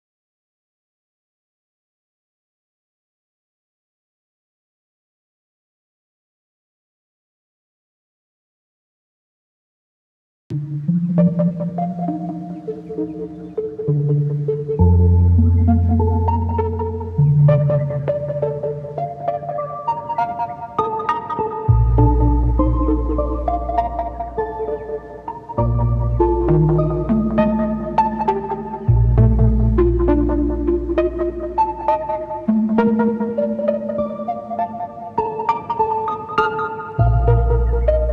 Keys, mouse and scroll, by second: 1.6 middle click, 2.4-9.0 drag, 9.0 middle click, 9.8 click, 10.5-11.5 middle drag, 11.5 click, 12.1-13.4 middle drag, 13.4-15.2 drag, 15.9-17.5 middle drag, 18.1-19.2 drag, 19.2 middle click, 19.7 click, 20.8-22.1 middle drag, 22.1-23.8 drag, 23.8 middle click, 25.8 click, 26.6-27.6 middle drag, 27.6-29.1 drag, 29.1 middle click, 29.6-30.9 drag, 31.4 middle click, 32.0-35.1 drag, 35.1 middle click, 35.7 click, 36.5 middle click, 37.0-38.1 drag.